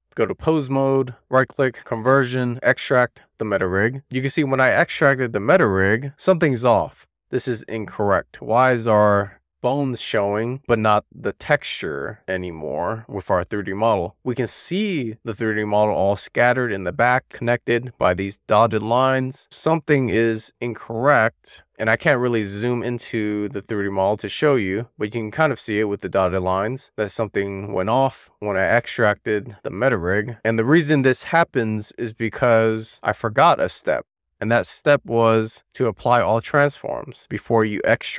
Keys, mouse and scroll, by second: 0.5 click, 1.5-9.4 right drag, 9.4-10.5 middle drag, 10.7-11.4 shift+middle drag, 12.8 shift+middle drag, 13.3 middle click, 14.8 shift+middle click, 15.5 shift+middle click, 16.4-16.9 scroll down 2, 16.9-17.4 shift+middle drag, 17.8 scroll up 2, 18.0 middle click, 19.1 shift+middle drag, 19.4-20.4 scroll up 8, 20.4-21.0 middle drag, 21.1-21.6 shift+middle drag, 21.7 shift+middle drag, 22.0 middle drag, 22.3 shift+middle drag, 22.5-23.2 middle drag, 23.5-23.8 scroll down 1, 23.8-24.2 scroll up 2, 24.2 click, 24.5 click, 25.4 KP_Decimal, 25.9 click, 26.1 KP_Decimal, 26.5 click, 27.7 KP_Decimal, 28.4 /, 28.8 /, 29.3-30.0 scroll down 11, 30.0 scroll up 1, 30.1-30.8 middle drag, 30.9-31.3 scroll up 4, 31.3-31.7 shift+middle drag, 31.8 scroll up 1, 32.0-32.4 shift+middle drag, 32.6-33.6 scroll up 3, 33.6-34.2 scroll down 7, 34.2-34.5 scroll up 2, 34.7 scroll up 5, 34.8-35.3 shift+middle drag, 35.4-36.9 scroll up 1, 36.9-37.4 drag.